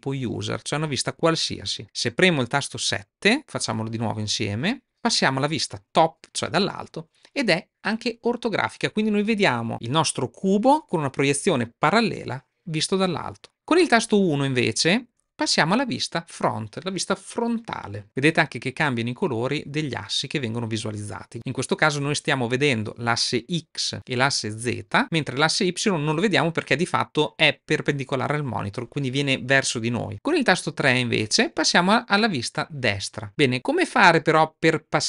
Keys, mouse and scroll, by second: 4.4 KP_7, 15.0 KP_1, 31.0 KP_5.